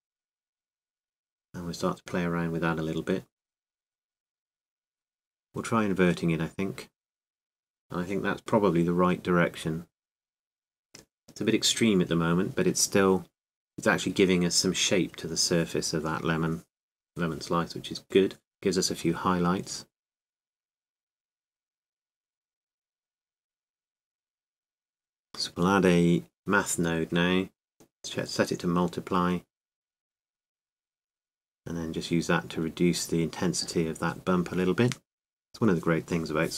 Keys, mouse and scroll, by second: 3.6-5.6 middle drag, 10.1-12.1 drag, 14.2-16.5 drag, 29.1-36.5 drag, 35.0-36.5 middle drag.